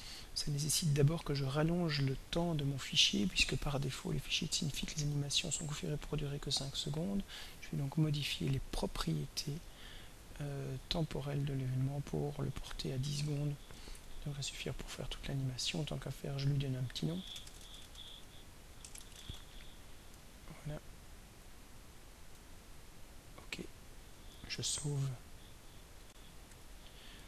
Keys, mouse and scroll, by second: 0.7 click, 5.8 click, 8.8 click, 10.4 click, 12.0 click, 13.3-14.4 typing, 14.8 click, 16.3 click, 17.0-19.8 typing, 20.1 click, 22.2 click, 23.5 click, 24.7 ctrl+s, 26.0 r, 26.5 Escape.